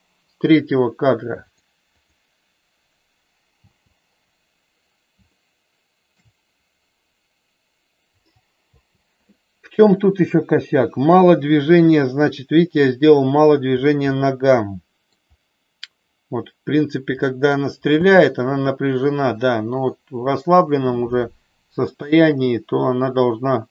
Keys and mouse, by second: 1.4 click, 2.0 click, 3.6 space, 5.3 middle click, 8.6 space, 11.6-13.6 middle drag, 14.2-15.2 middle drag, 17.3 middle click, 17.9 space, 23.6 space.